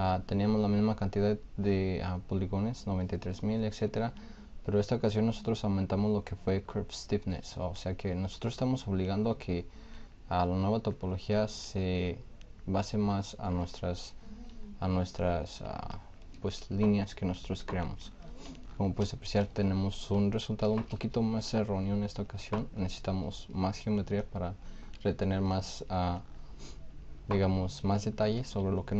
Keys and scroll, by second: 20.5 shift+f.